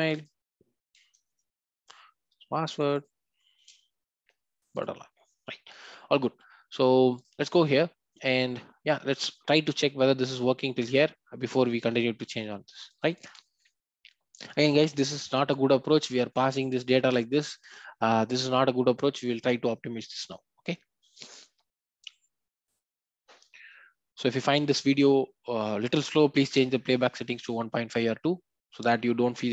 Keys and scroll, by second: 1.2 shift+F6, 3.6 shift+F6.